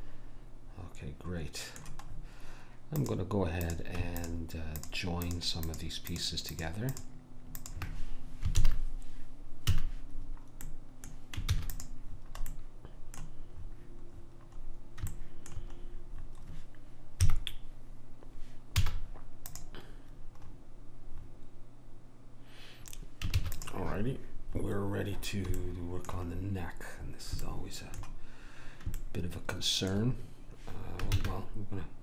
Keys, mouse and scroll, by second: 2.1 middle click, 2.9-9.4 drag, 8.6 ctrl+j, 9.7 a, 11.5 ctrl+s, 17.2 KP_1, 18.8 z, 20.5-23.4 middle drag, 23.4 ctrl+s, 24.0-25.2 middle drag, 25.3 middle click, 25.8 middle click, 31.1 shift+a.